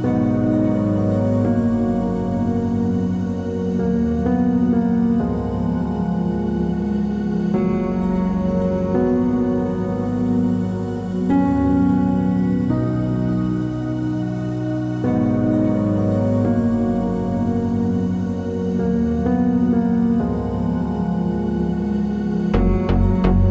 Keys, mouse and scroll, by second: 0.3 ctrl+s, 1.6 click, 1.8 Tab, 2.3 3, 2.4 drag, 2.8 shift+drag, 3.1-5.1 shift+middle drag, 3.6-3.9 scroll up 2, 5.1 click, 6.1 ctrl+click, 7.1 2, 7.4 click, 7.7 ctrl+click, 8.6 3, 8.7 click, 8.9 ctrl+click, 9.1-12.7 middle drag, 12.7 click, 16.1 Tab, 16.2 scroll down 2, 16.4 click, 16.5-18.5 middle drag, 18.5 click, 18.8 g, 19.6-20.5 middle drag, 20.5 click, 20.7-23.0 middle drag, 21.7-22.1 scroll up 2, 23.0-23.5 shift+right drag.